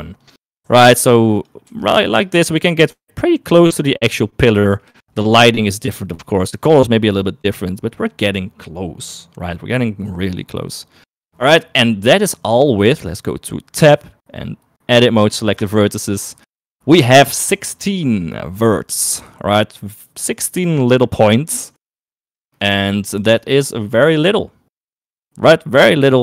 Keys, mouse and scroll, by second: 0.2 g, 1.0 s, 2.2 g, 5.3 shift+middle click, 14.0 Tab, 15.7 1, 22.3 shift+middle click, 23.6 Tab.